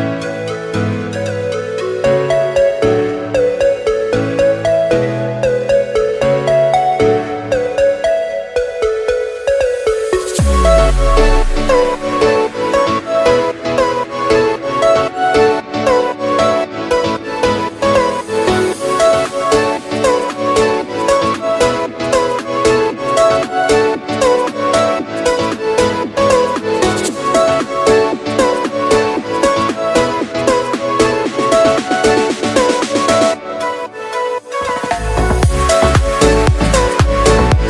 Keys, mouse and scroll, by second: 1.8 click, 2.8 click, 3.8 click, 4.0 Tab, 4.4-5.5 middle drag, 5.5 s, 6.5 a, 7.2 s, 8.8-11.4 middle drag, 11.4-12.9 drag, 12.9 s, 13.8 s, 15.7-16.8 scroll up 3, 16.8 g, 19.9 Tab, 20.1 scroll down 4, 20.3 middle click, 21.0 KP_0, 22.2 click, 23.1 middle click, 23.7 KP_0, 24.8 click, 26.0 click, 27.2 scroll down 2, 28.2 click, 31.4-32.9 scroll up 3, 32.9-34.1 scroll down 7, 34.1-36.2 drag.